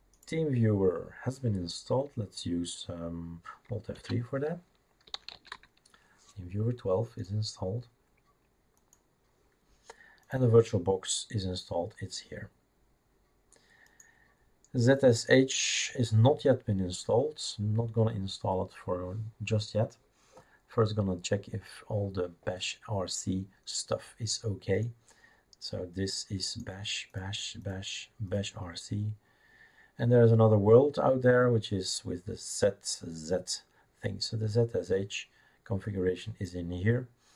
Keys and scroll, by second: 4.0 alt+F3, 4.8-6.0 typing.